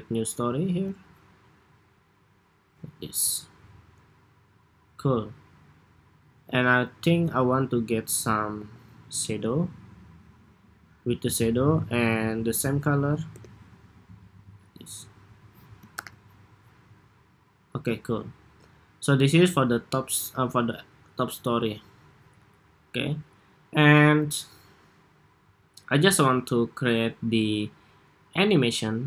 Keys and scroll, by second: 8.3 super+c, 12.5 super+v, 15.6 super+-, 17.7 super+s.